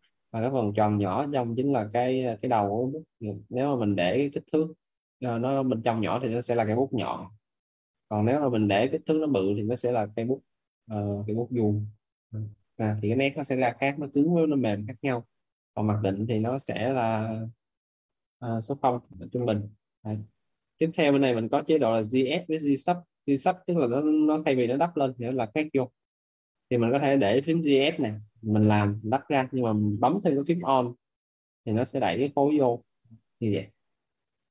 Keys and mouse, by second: 8.0 Escape, 8.7 click, 11.5 alt+`, 17.4 Escape, 17.8 click, 18.8 0, 19.3 KP_Enter, 23.0 click, 26.7 click, 28.2 right click, 28.7 click, 30.5 click, 32.3 right click, 32.8 alt+click, 34.0 alt+right click.